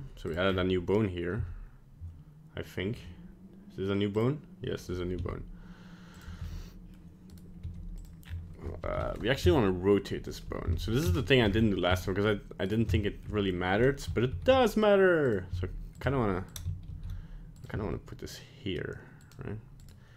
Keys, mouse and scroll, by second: 0.5-0.9 scroll up 7, 1.3 x, 4.1 click, 5.1 s, 6.4 g, 7.6 g, 8.2-8.8 scroll up 3, 8.8 r, 11.5 scroll up 5, 11.9 s, 12.9 shift+middle click, 14.3 ctrl+alt+s, 15.5 s, 16.0 g, 16.8 ctrl+alt+s, 17.7 g, 19.8 right click.